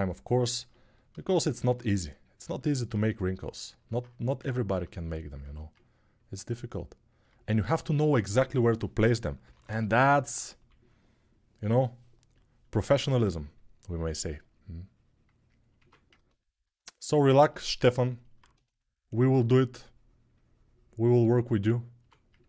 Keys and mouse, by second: 0.0-12.6 ctrl+drag, 1.2-4.2 alt+middle drag, 4.2 ctrl+r, 9.2-10.3 typing, 12.6 3, 15.5 1, 18.9-22.4 alt+drag, 19.1 2, 21.8 1.